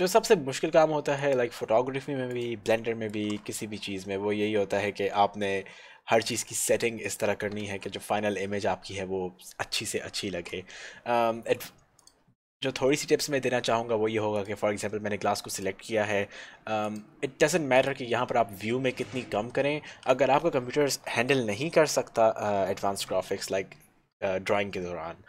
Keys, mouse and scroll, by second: 2.4 shift+click, 3.4 z, 7.2 shift+click, 7.7 shift+z.